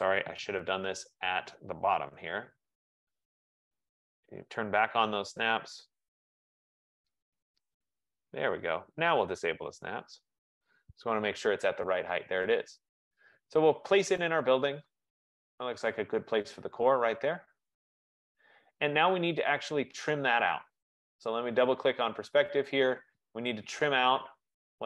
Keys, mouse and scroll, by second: 0.6 Escape, 1.8-2.7 typing, 6.2 click, 6.2 typing, 8.3 click, 10.2 click, 17.0 click, 20.0 click, 20.2 click, 21.9 click, 22.1 click.